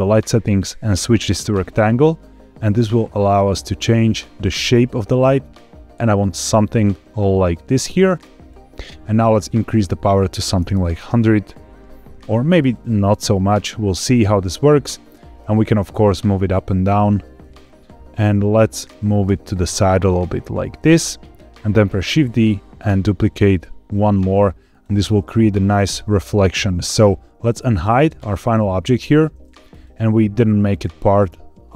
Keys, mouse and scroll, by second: 0.4-1.6 drag, 2.7 click, 9.1-10.9 drag, 10.6 KP_0, 12.5-15.0 drag, 15.3 click, 15.8 g, 15.9 z, 17.3-18.4 drag, 19.2 g, 19.5 x, 21.4 click, 22.0 shift+d, 22.4 x, 24.6 click, 25.7 scroll up 2, 28.1 click, 29.6 click.